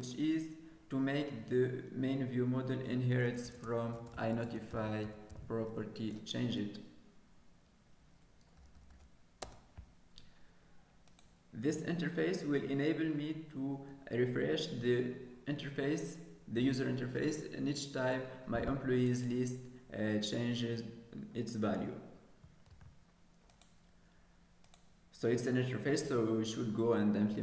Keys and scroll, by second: 22.7 ctrl+s.